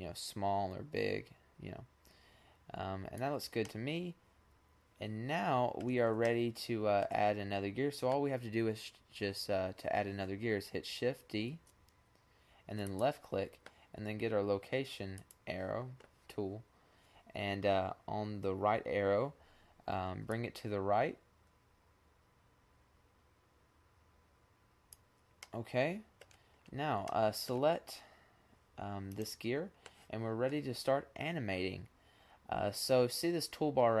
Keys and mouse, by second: 3.3-5.1 middle drag, 5.7-8.0 middle drag, 10.4 shift+d, 14.6-16.4 middle drag, 19.2-20.8 drag, 20.8-21.5 middle drag, 24.9-25.3 middle drag, 26.6-28.2 middle drag, 28.2-30.0 drag.